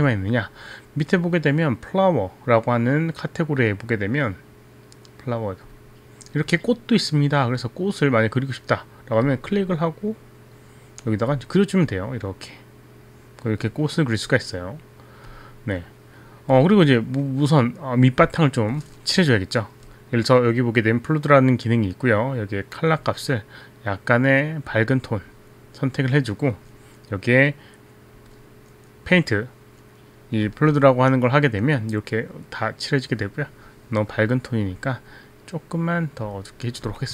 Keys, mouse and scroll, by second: 5.8 click, 9.4 click, 10.7 click, 12.0 click, 15.4 click, 23.1 click, 24.8 click, 28.3 click, 33.4 click, 34.7 click, 35.1 click, 35.8 click, 35.8 click, 36.4 click.